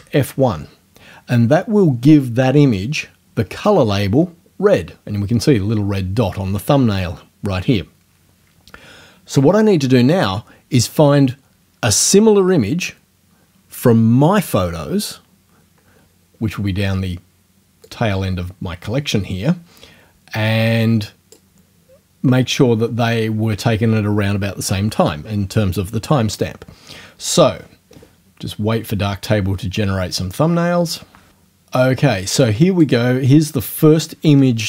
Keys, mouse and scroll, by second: 17.9-21.5 drag, 22.6-23.0 scroll down 2, 32.8 click.